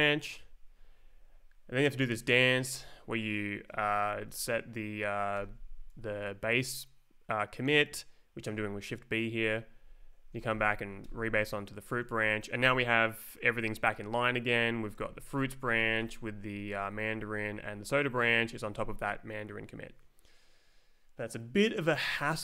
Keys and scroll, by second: 0.3 Right, 1.0 Down, 5.3 shift+b, 9.9 Left, 10.2 Down, 10.5 r, 11.0 Return, 12.1 Right, 14.9 Left, 15.1 Down, 15.3 Return, 15.8 Escape, 15.9 Up, 16.0 Return, 16.6 Down, 16.8 Up, 16.9 Escape, 17.5 Up, 18.3 Right.